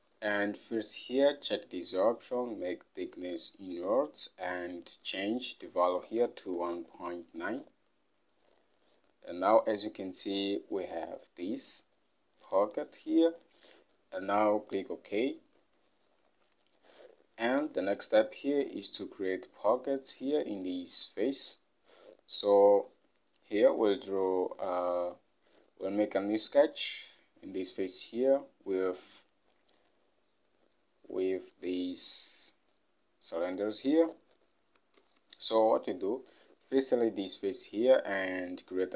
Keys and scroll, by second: 6.4-7.7 typing, 16.6 Home, 21.4 ctrl+Tab, 35.1 ctrl+Tab.